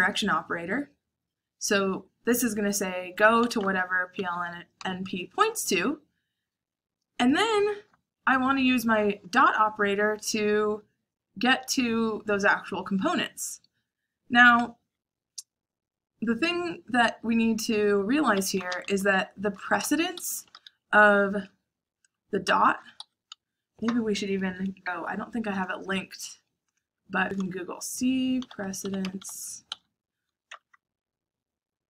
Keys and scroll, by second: 3.1-5.3 typing, 18.3 Escape, 19.0 h, 19.8 shift+9, 20.0 Escape, 20.4 shift+a, 22.3-23.1 typing, 27.8-30.4 typing.